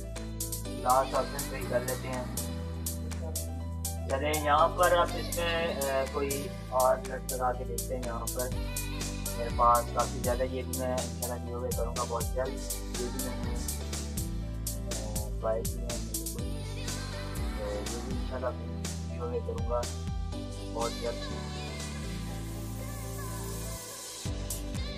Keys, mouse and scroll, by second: 0.2 click, 5.5 click, 5.5 click, 13.1 click, 18.4 Down, 22.3 click.